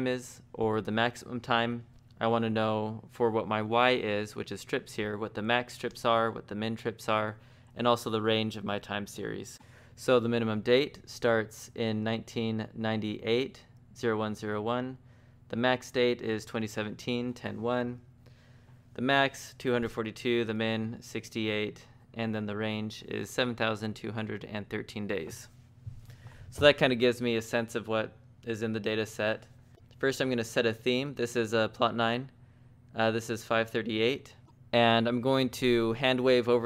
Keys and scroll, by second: 28.7 Escape, 29.1-30.1 typing, 33.6-34.8 typing.